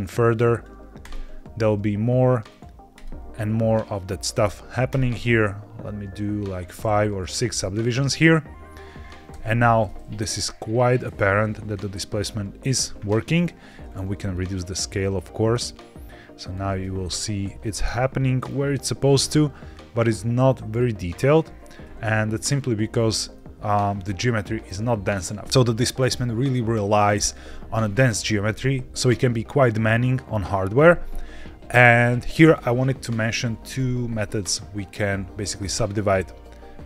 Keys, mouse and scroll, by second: 0.4 right click, 2.4 right click, 4.2 right click, 6.9 middle click, 9.2 Tab, 9.8-12.2 middle drag, 13.8-16.4 shift+drag, 16.9 scroll up 3, 17.5 shift+middle drag, 17.9-18.4 middle drag, 19.2-21.3 middle drag, 23.3 middle click.